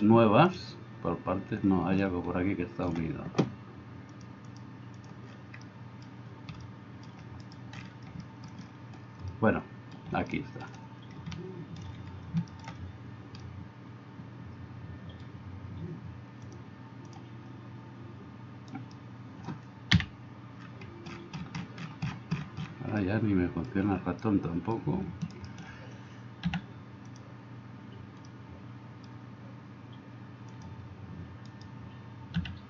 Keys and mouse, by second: 4.1 click, 4.5 middle click, 5.1-32.6 drag, 7.5 middle click, 7.5 right click, 18.7 middle click, 18.7 right click, 19.9 KP_Decimal, 25.4-26.5 middle drag, 25.4-26.5 right drag, 26.5 x, 31.5 middle click, 31.5 right click, 32.4 x.